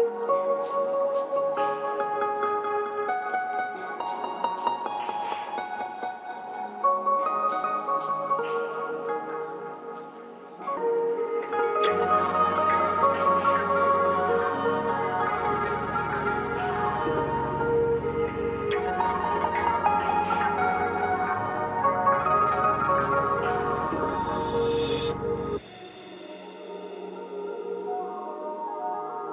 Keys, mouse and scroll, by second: 8.5 g, 8.9-16.1 drag, 17.3 click, 20.9 click.